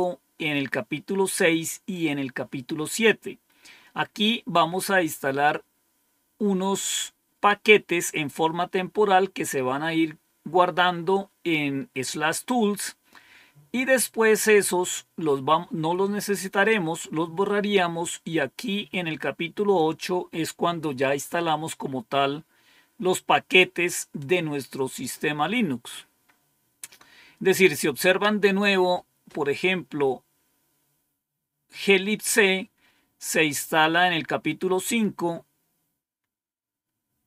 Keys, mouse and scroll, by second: 0.2-1.8 scroll down 1, 4.5-5.2 scroll up 1, 5.2-6.6 scroll up 1, 13.4-15.2 scroll down 1, 20.5-21.2 scroll down 1, 21.2-26.0 scroll down 1, 26.0-27.4 scroll up 1, 27.4-28.2 scroll up 1, 34.6-35.6 scroll down 1.